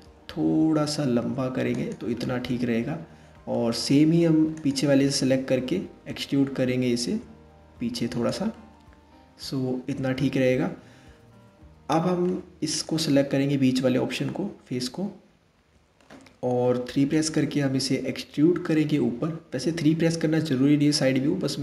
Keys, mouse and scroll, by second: 1.9-4.2 middle drag, 4.2 click, 4.7 middle click, 5.6 e, 8.1-11.2 middle drag, 12.3 click, 13.8-16.3 middle drag, 16.3 KP_3, 18.2 e.